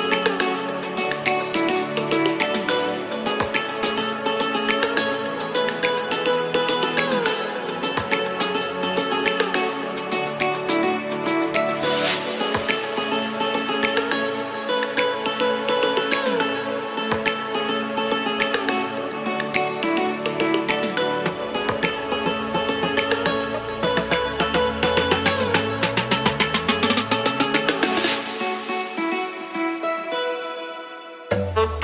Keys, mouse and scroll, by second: 15.4-18.1 typing, 27.0 ctrl+z, 27.2 ctrl+z, 28.5 s, 29.1 g, 29.3 z.